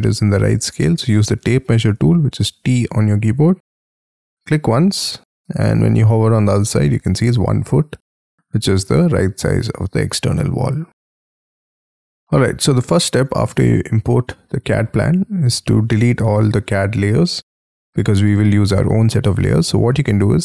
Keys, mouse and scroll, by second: 12.2 middle click, 13.0-14.0 scroll down 13, 14.0 scroll up 1, 14.3 middle click, 14.7 scroll down 1, 17.0 scroll up 6.